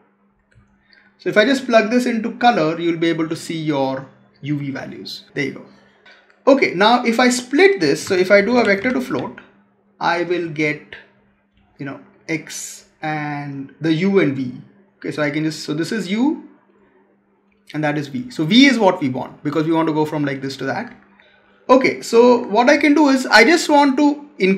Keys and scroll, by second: 7.9 Tab.